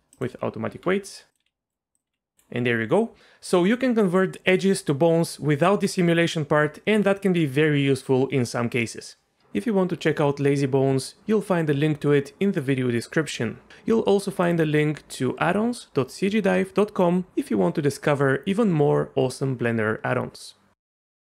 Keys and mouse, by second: 0.7 Tab, 1.4 r, 2.1 r.